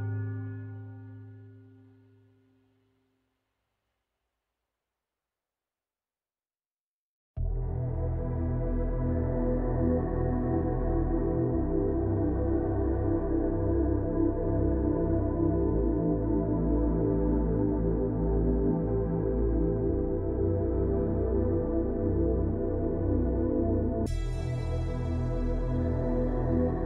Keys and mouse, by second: 0.4 shift+click, 0.8 middle click, 1.4 shift+click, 1.8 middle drag, 2.5 shift+middle click, 3.3 shift+middle click, 5.5 shift+middle drag, 5.9-6.4 shift+middle drag, 6.4-7.2 shift+middle drag, 8.0 middle click, 10.1 Tab, 10.5-11.5 drag, 11.5-12.0 middle drag, 12.3 shift+click, 13.0 click, 14.4-16.0 drag, 17.5-20.0 drag, 21.5-22.9 drag, 23.6-24.7 drag, 24.7-25.2 middle drag, 25.6-26.0 shift+middle drag, 26.3 middle drag, 26.7 shift+middle click.